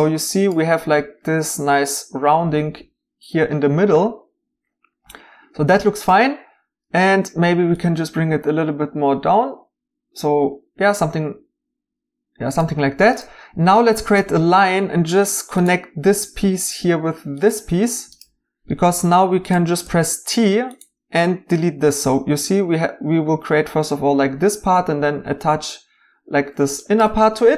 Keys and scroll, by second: 19.8 t.